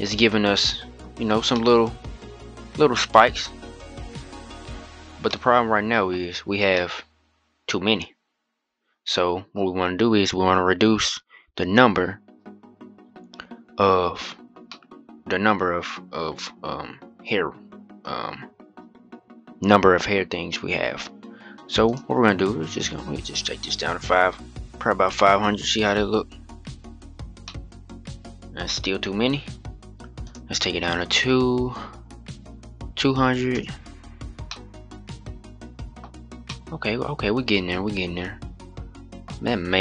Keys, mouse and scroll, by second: 0.8-1.3 scroll up 2, 1.3-4.3 middle drag, 4.5-4.9 scroll down 5, 4.9 scroll up 1, 5.0-5.9 middle drag, 5.9-6.5 scroll up 2, 6.5-11.0 middle drag, 11.0-12.7 scroll up 25, 12.7-13.4 scroll up 9, 13.4-13.7 scroll up 4, 14.1-14.4 scroll down 4, 14.4-17.4 middle drag, 17.9-19.6 scroll up 1, 21.6-24.6 drag, 24.6 0, 27.2-28.4 middle drag, 28.4-28.9 scroll up 3, 30.0-32.7 drag, 32.7 0, 34.2-35.8 middle drag, 35.8-36.2 scroll down 3, 36.2-39.0 middle drag, 39.0-39.8 scroll up 2.